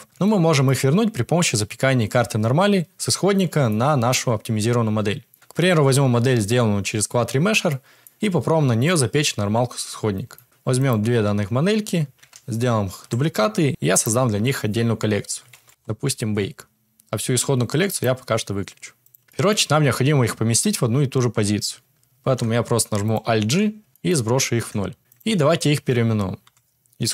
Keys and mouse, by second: 0.2-0.6 shift+middle drag, 3.6 shift+middle click, 5.2 middle click, 7.6-8.0 middle drag, 10.3 shift+middle click, 10.7 shift+middle click, 12.3 shift+d, 13.7 m, 17.8 click, 19.0 click, 19.2 shift+middle click, 22.2 alt+g, 23.0 click, 23.4 alt+g, 24.1 middle click, 24.8 KP_Decimal, 25.0 Tab, 25.0 click, 26.4 F2.